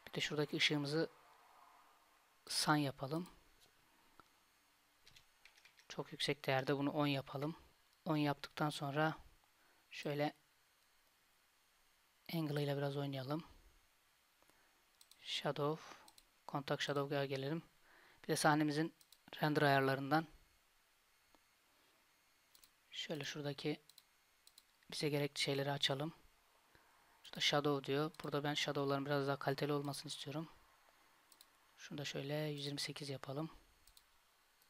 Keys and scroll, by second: 5.7 KP_0.